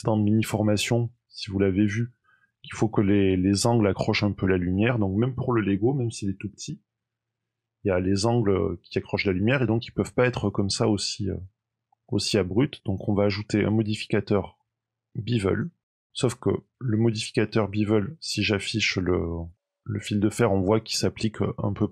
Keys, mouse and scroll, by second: 0.3 shift+middle click, 0.8 middle click, 3.0 middle click, 4.3-4.6 scroll up 2, 8.9 middle click, 12.8 click, 15.9 middle click, 17.5 shift+middle click, 19.4 click.